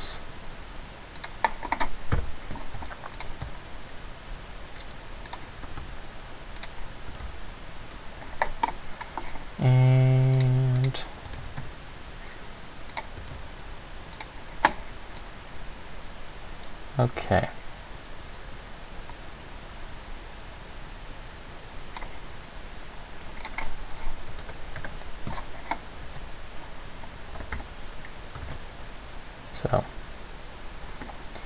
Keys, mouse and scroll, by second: 1.4 click, 2.3 KP_0, 2.9 s, 3.4 click, 3.6 s, 5.5 click, 5.9 r, 6.9 click, 7.3 g, 10.5 right click, 11.0 right click, 11.5 g, 13.2 click, 13.4 g, 14.4 click, 15.4 click, 23.6 click, 26.1 a, 27.7 Escape, 28.7 alt+a, 31.2 Escape.